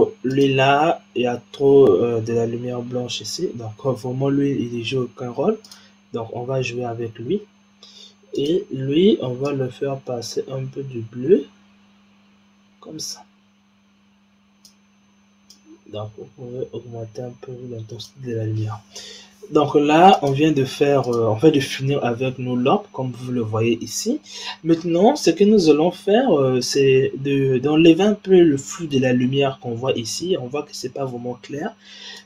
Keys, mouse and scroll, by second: 0.2 click, 1.2-3.4 scroll up 4, 3.5-5.5 scroll down 6, 5.5 click, 6.5-7.7 scroll up 5, 7.7-8.2 scroll up 2, 8.2 click, 15.4-18.4 drag, 18.5-20.1 scroll down 6, 20.1 click, 21.0 click, 21.6-24.5 scroll up 4, 24.5 scroll up 1, 26.2-26.8 scroll down 3, 26.9-29.9 scroll up 4, 32.0 click.